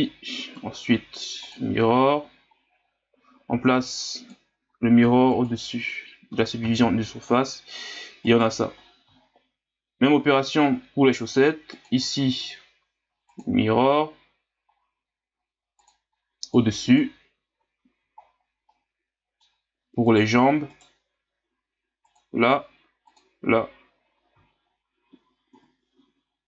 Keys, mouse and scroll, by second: 3.8 click, 5.3-6.6 drag, 6.6 ctrl+s, 8.3 right click, 8.8-9.2 scroll down 1, 9.2 scroll up 6, 11.3-14.7 drag, 15.8-16.9 drag, 18.2 scroll down 6, 18.7-20.1 middle drag, 20.1 right click, 20.7 right click, 22.1-24.1 drag, 24.1 scroll down 4, 24.4 scroll up 5, 25.5 KP_1.